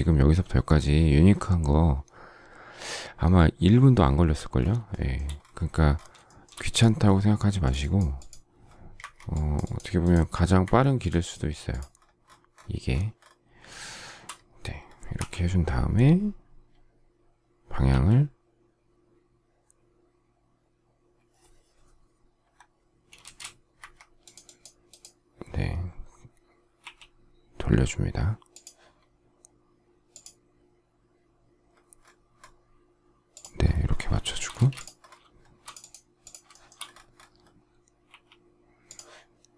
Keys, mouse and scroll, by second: 4.9 shift+middle click, 6.2 shift+middle click, 8.9 Escape, 11.2 Escape, 13.9 shift+middle click, 15.1 k, 17.8 q, 23.2 space, 23.7 Escape, 26.8 q, 34.2 shift+middle click, 34.5 space, 36.5 shift+middle click, 36.8 shift+double middle click.